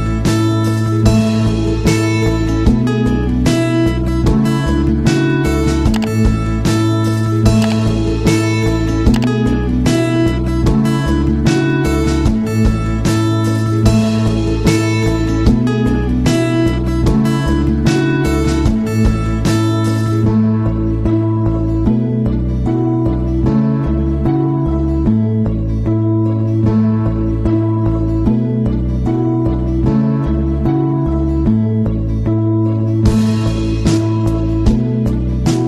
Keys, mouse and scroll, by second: 1.4 click, 2.3-2.6 scroll up 1, 9.6-13.3 drag, 13.3 click, 17.0-23.8 drag, 23.8-26.5 drag, 26.5 Down, 32.1-35.6 drag.